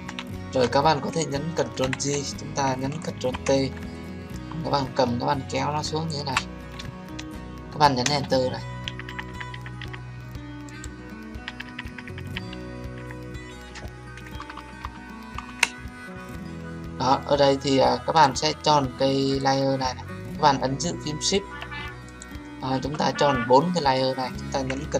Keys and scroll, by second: 1.8 ctrl+j, 3.1 ctrl+t, 8.0 Return.